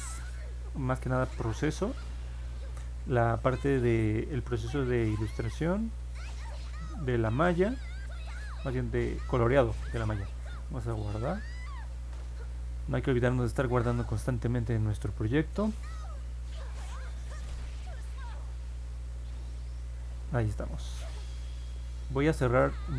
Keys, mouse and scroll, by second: 11.7 ctrl+s.